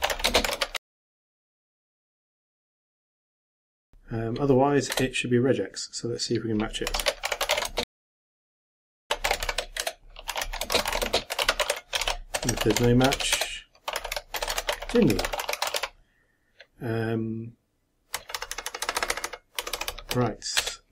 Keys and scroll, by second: 0.7-3.9 typing, 8.3-10.3 typing, 12.0-13.6 typing.